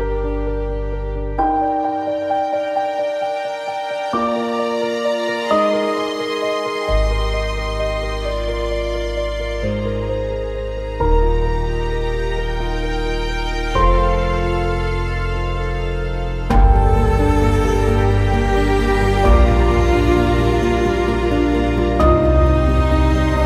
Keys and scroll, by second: 2.7 r.